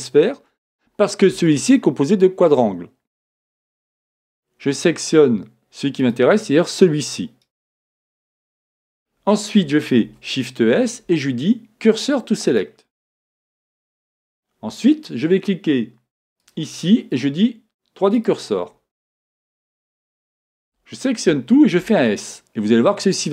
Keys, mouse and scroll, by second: 7.4 click, 7.4-9.4 right drag, 16.4-18.3 drag, 20.3 a, 20.7 a, 21.9 s.